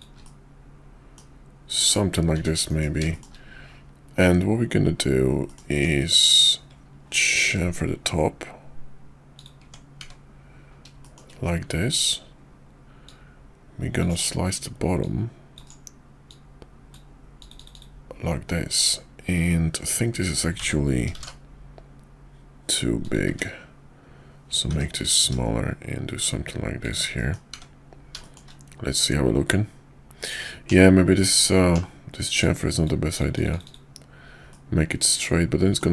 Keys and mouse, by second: 0.2-1.1 middle drag, 1.8 KP_5, 2.3 `, 2.7 KP_5, 3.1 shift+middle click, 5.5 middle click, 5.7 Tab, 6.2 click, 7.4 ctrl+b, 9.6 Tab, 10.0 `, 11.0 shift+middle click, 13.0-14.0 drag, 15.0 click, 16.3 click, 20.6 s, 23.3 `, 24.7 g, 27.1 middle drag, 27.5 `, 28.2 middle drag, 31.7 /, 32.4 click, 34.5-35.8 middle drag.